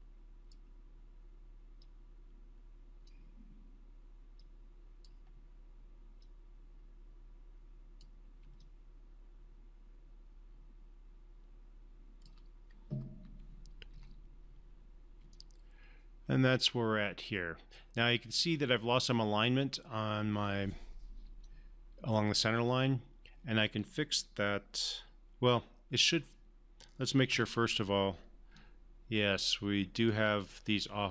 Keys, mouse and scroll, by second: 8.6-12.3 alt+drag, 13.9 3, 15.3-18.4 alt+drag, 21.2 alt+click, 21.4-23.6 alt+drag, 27.3 1, 28.5 click, 28.7-30.1 alt+drag.